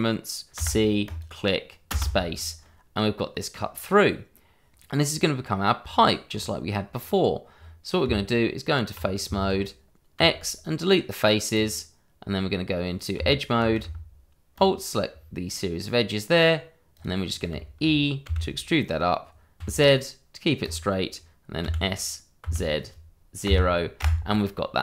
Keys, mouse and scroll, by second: 0.5 c, 1.0 click, 1.9 space, 2.3-2.6 scroll down 1, 2.6 middle click, 5.5 click, 6.8 scroll up 1, 7.6-8.0 scroll down 1, 8.0 Tab, 9.3 shift+z, 11.5 click, 13.1 Tab, 14.5 alt+click, 15.4 middle click, 16.9 click, 17.2-17.5 scroll down 1, 17.5 shift+middle click, 18.2 e, 19.6 z, 20.6 click, 21.6 s, 22.4 z, 23.4 KP_0, 24.0 KP_Enter.